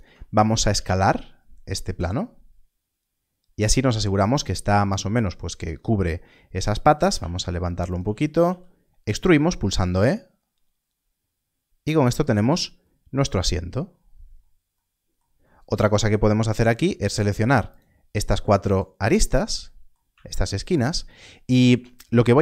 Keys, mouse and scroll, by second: 4.4 click, 5.5 s, 5.6 click, 6.9 g, 7.0 z, 7.9 shift+click, 8.5 e, 12.2 click, 13.4 scroll down 1, 16.0 click, 17.7 shift+click, 18.6 shift+click, 21.8 scroll down 1.